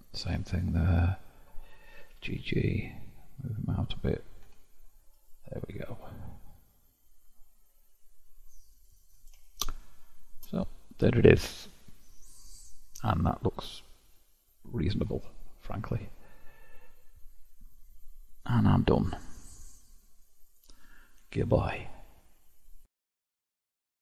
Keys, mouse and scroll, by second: 0.9 ctrl+click, 2.0 g, 4.4 Tab, 5.3-7.5 middle drag, 7.5-8.7 scroll down 6, 8.7 click, 9.7-15.4 shift+middle drag, 15.4-18.4 scroll down 6.